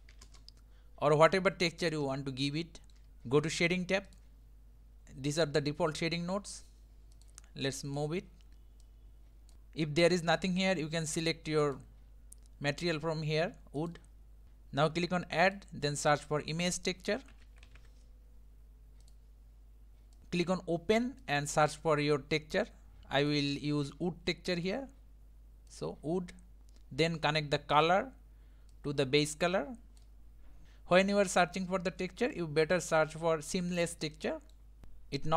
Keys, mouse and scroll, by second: 2.5-3.1 shift+middle drag, 4.3 click, 9.5-22.1 drag, 22.4 click, 24.1-25.8 drag, 30.1-30.6 drag, 30.6-34.8 middle drag, 34.8 scroll up 1.